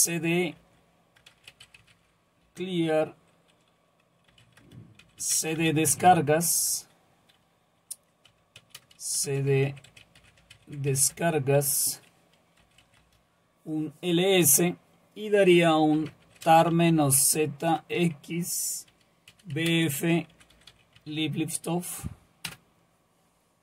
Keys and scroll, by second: 0.0-2.4 typing, 2.4 Return, 4.1-6.6 typing, 8.3-13.1 typing, 15.7-21.2 typing, 22.5 Return.